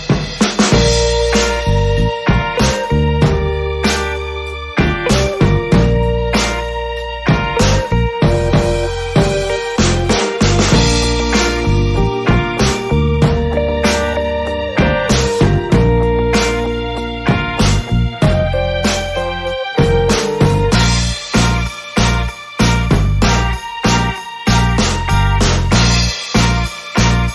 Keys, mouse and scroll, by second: 4.1-7.8 middle drag, 7.8 KP_5, 8.8 KP_1, 12.2 shift+d, 15.3 z, 16.6 Tab, 18.0 b, 20.9-21.2 drag, 21.4 click, 24.0 KP_1, 26.0-27.2 middle drag.